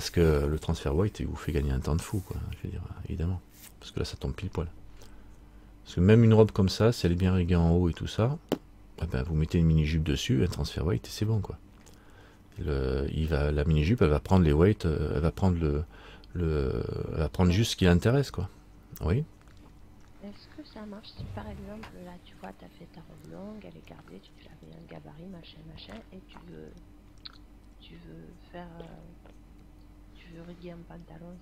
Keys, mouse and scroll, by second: 11.5 middle click.